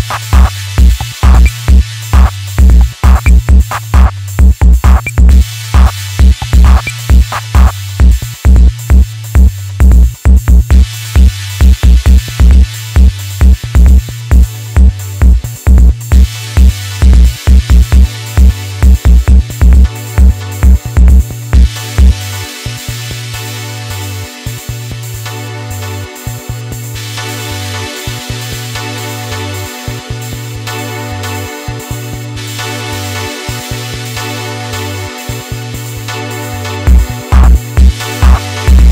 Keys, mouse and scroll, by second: 0.6 click, 6.5-8.8 middle drag, 8.8 click, 12.6 KP_3, 13.3 Tab, 13.9-14.3 shift+middle drag, 14.3 alt+z, 14.6-17.0 middle drag, 17.0 Tab, 17.8 middle click, 18.2 alt+z, 18.6 middle click, 19.6 click, 20.3 click, 21.5 KP_3, 22.6 click, 23.9 scroll down 1, 23.9 middle click, 24.9 Tab, 25.2 scroll down 2, 25.4-26.1 middle drag, 26.3 KP_3, 27.4 alt+z, 27.9-29.2 shift+middle drag, 29.2 KP_1, 29.6-30.0 scroll up 2, 30.0-30.5 shift+middle drag, 30.5-31.0 scroll up 2, 32.0 Tab, 32.8 click, 34.0 ctrl+shift+click, 35.0 KP_3, 36.1 click, 37.3 KP_1, 38.5 scroll down 3, 38.7-38.9 middle drag.